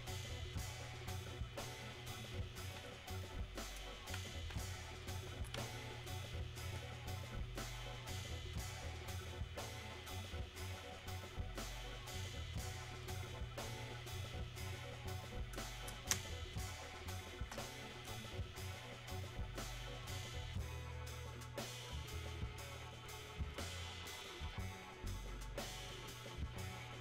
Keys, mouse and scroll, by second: 4.4-5.8 alt+drag, 5.8-13.8 alt+drag, 14.1-16.2 drag, 16.2 space, 18.8-27.0 drag.